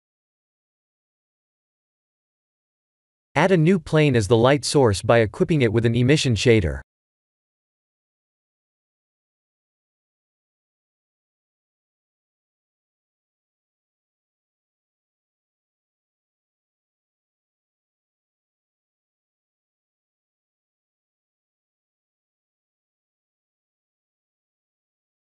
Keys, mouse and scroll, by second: 0.1 click, 2.5 click, 3.7 shift+a, 9.0 r, 13.0 click, 14.2 s, 16.9 click, 18.7 click, 23.1 click, 24.0 click, 25.1 click.